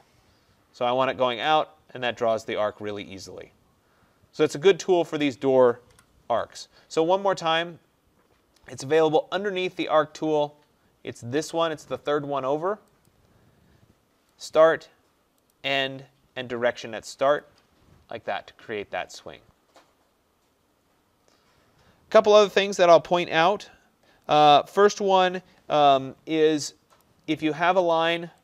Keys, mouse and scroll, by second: 1.5 click, 4.6 click, 5.3 click, 6.0 Delete, 9.9 click, 13.1 click, 20.6-21.3 scroll, 21.3-21.8 middle click, 21.6 middle click, 21.7 middle click, 22.6 middle click, 27.1 click, 28.0 click.